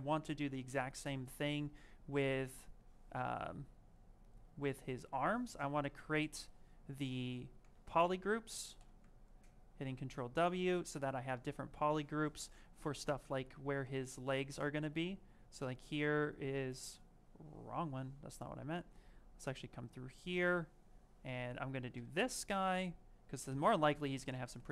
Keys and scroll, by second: 8.4-9.2 typing, 16.9 space.